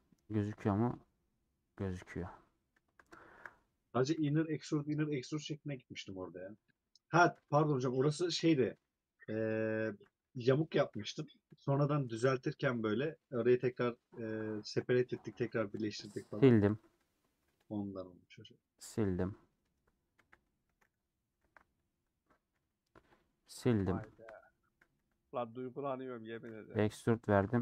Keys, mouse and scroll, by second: 0.1-1.7 middle drag, 1.7 /, 2.7 scroll up 1, 2.8 scroll down 1, 3.1 shift+middle click, 4.1 KP_Decimal, 5.1 click, 5.2 middle click, 6.0 scroll up 1, 6.3 middle click, 7.3 3, 8.1 scroll down 2, 8.5 scroll up 2, 10.4 2, 10.5 alt+click, 10.9 alt+z, 11.7 alt+click, 13.6 3, 13.6-17.8 drag, 18.9-20.1 middle drag, 20.1 KP_1, 20.6 alt+z, 24.3 middle click, 24.9 2, 25.9 middle click, 26.4 e, 26.9-27.4 scroll down 2, 27.4 s.